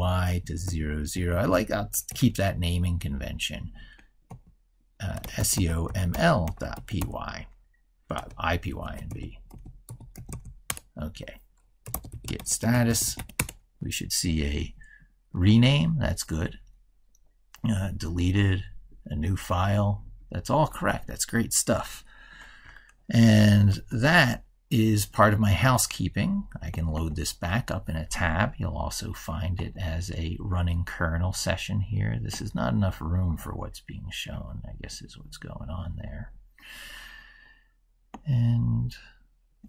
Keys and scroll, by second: 23.6 ctrl+super+Left.